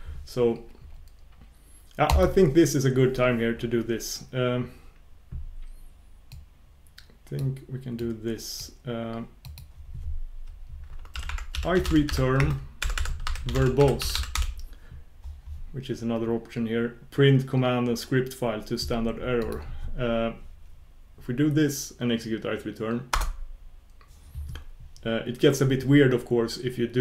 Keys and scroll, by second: 2.1 ctrl+super+Return, 23.3 ctrl+super+Return.